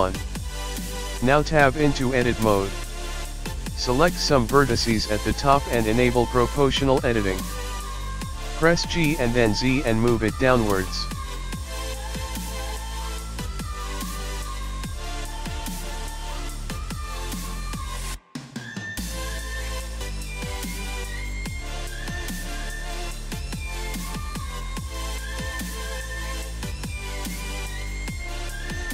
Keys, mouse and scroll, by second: 1.3 click, 5.1 click, 7.6 click, 11.5 click, 11.9 click, 13.5 click, 17.4-18.1 scroll up 2, 17.6 g, 18.1 click, 19.2 click, 19.6 click, 21.6 click.